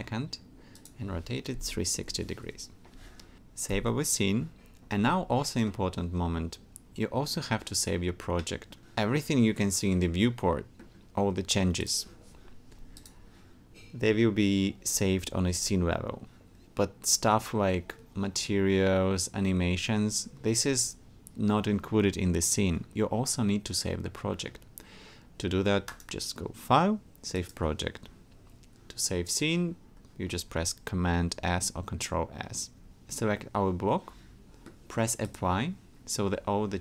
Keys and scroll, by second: 1.4-2.6 typing, 3.7 super+s, 31.4 super+s.